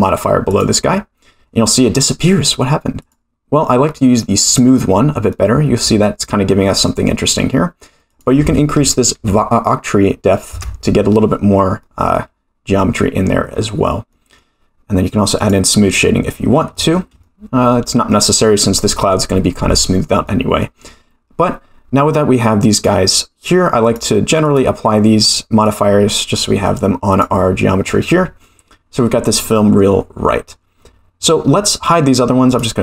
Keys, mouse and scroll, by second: 3.0 click, 4.5 click, 5.3-5.9 middle drag, 6.3-6.9 middle drag, 8.1-11.1 drag, 11.8-12.1 middle drag, 12.8 middle drag, 13.5-14.1 scroll up 2, 14.1 middle drag, 15.7 click, 16.3 scroll down 2, 16.7 shift+middle drag, 17.2-18.1 middle drag, 20.2-20.6 middle drag, 22.7 click, 23.8-24.9 drag, 25.2-26.1 drag, 26.6 right click, 27.6-28.4 middle drag, 29.3-29.8 middle drag, 32.5 click.